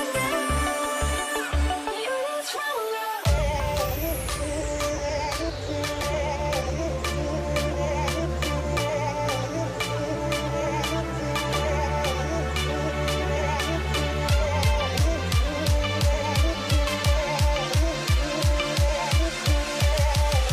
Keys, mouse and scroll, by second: 0.0 v, 4.0 Return, 4.4 shift+Up, 4.6 shift+Up, 4.8 shift+Up, 5.0 shift+Up, 6.8 shift+Up, 7.2 shift+Up, 7.8 v, 11.6 alt+click, 12.7 ctrl+t, 13.1 ctrl+right click, 17.2 Return, 18.3 alt+scroll up 1, 19.3-19.9 alt+scroll up 1, 20.2-20.5 alt+scroll down 5.